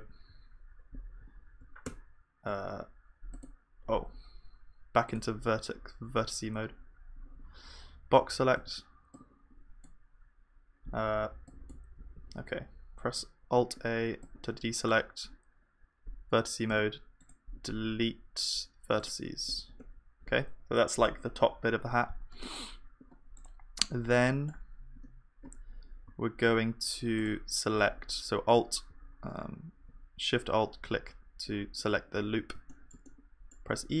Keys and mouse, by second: 0.3 z, 1.8 Tab, 3.6-7.1 drag, 8.6 b, 11.3 b, 13.4 alt+a, 14.8-16.7 drag, 16.7 BackSpace, 17.2-19.3 right drag, 19.8 Tab, 24.1-28.9 middle drag, 25.0 Tab, 28.9 click, 32.7-34.0 middle drag, 33.6 e.